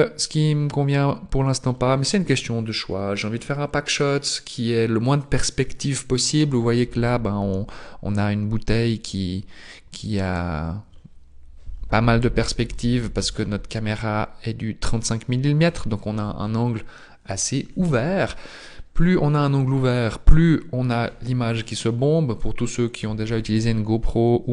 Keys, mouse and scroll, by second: 0.5 scroll up 2, 9.1-9.5 scroll down 1, 9.5-10.1 scroll up 1, 10.1-10.8 scroll up 2, 11.8-12.3 scroll down 1.